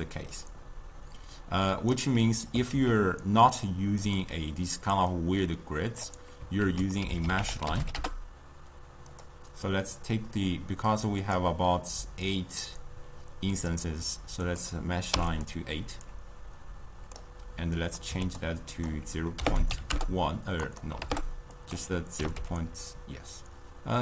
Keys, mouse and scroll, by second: 2.1 d, 2.8 ctrl+a, 5.2-6.7 drag, 6.7 ctrl+a, 11.3 click, 13.6 click, 14.5 click, 16.1-18.4 drag, 18.8-24.0 drag.